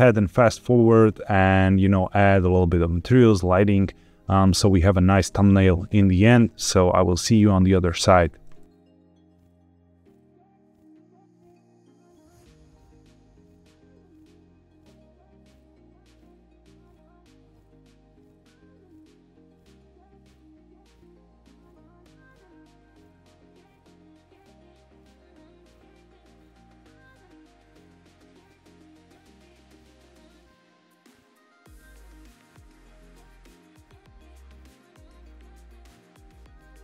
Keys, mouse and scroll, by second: 9.2 shift+s, 9.4 scroll down 3, 9.6 shift+a, 10.1 scroll down 2, 10.2 Tab, 10.3 s, 10.7 click, 11.0 Tab, 11.1 scroll up 4, 11.5 KP_0, 12.1 q, 12.7 middle click, 12.8 shift+middle drag, 13.7 q, 16.1 ctrl+b, 16.7 click, 16.9 drag, 17.2 drag, 18.4 drag, 18.6 drag, 18.9 click, 19.7 scroll down 2, 19.8 shift+a, 20.5 g, 20.5 z, 20.6 click, 21.0 z, 21.3 click, 21.7 click, 21.9 click, 22.4-23.6 typing, 23.0 click, 24.8 click, 25.0 scroll up 1, 25.2 scroll down 1, 25.4-27.0 typing, 25.8 click, 26.3 click, 27.5 click, 27.9 click, 28.2 g, 28.5 click, 28.5 z, 28.7 scroll up 4, 29.0 shift+middle click, 29.1 click, 29.7 drag, 30.0 click, 30.8 click, 31.2 click, 32.1 click, 32.3 click, 33.2 click, 33.5 click, 34.6 click, 34.9 click.